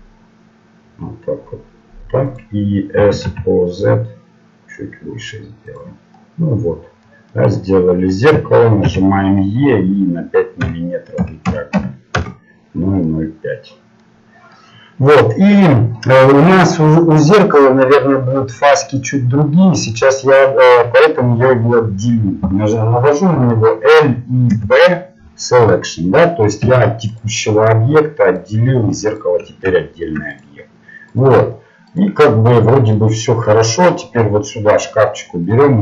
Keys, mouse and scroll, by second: 3.2 s, 6.1-10.6 middle drag, 8.8 e, 13.2-14.9 middle drag, 23.8 l, 25.6 p, 26.6 Tab, 27.1-29.7 right drag, 29.7-31.9 middle drag, 31.9-35.8 right drag, 32.9-35.8 drag.